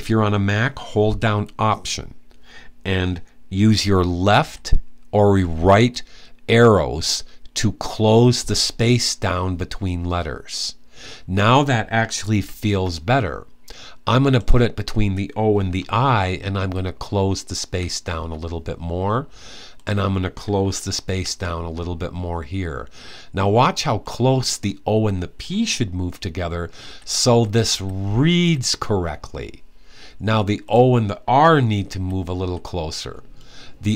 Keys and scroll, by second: 4.1 alt+Left, 5.1 alt+Left, 12.1 alt+Right, 15.3 alt+Right, 16.3 alt+Left, 17.4 Left, 20.8 alt+Left, 26.6 alt+Left, 27.0 alt+Left, 27.5 alt+Left, 28.2 typing, 31.7-32.2 typing.